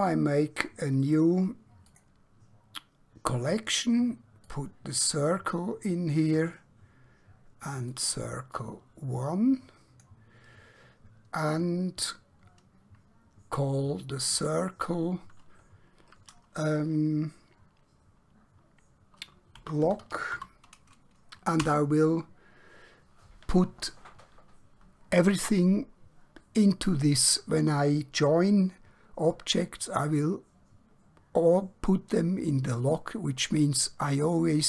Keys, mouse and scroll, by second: 1.0 right click, 1.8 click, 4.5 click, 14.3 click, 19.6 l, 21.7 Return.